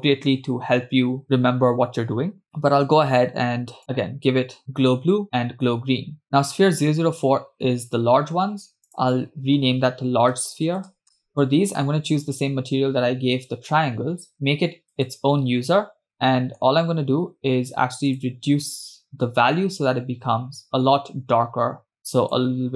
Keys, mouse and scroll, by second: 2.4-4.6 drag, 5.0 click, 5.7 click, 9.3-11.3 drag, 11.3 e, 11.7-14.3 drag, 15.4 click, 16.3-17.2 middle drag, 17.2-17.6 scroll up 3, 18.2 click.